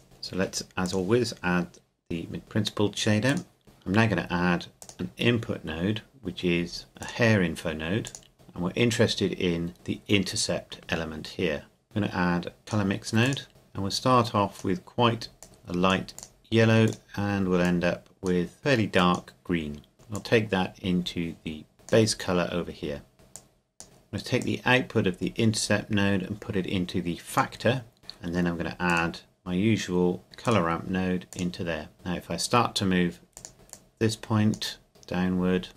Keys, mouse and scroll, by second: 0.0 Delete, 0.8 click, 3.3 click, 3.6 Delete, 4.8 click, 7.0 click, 11.8 click, 23.4 click, 28.0 middle click, 28.9 click, 30.4 click.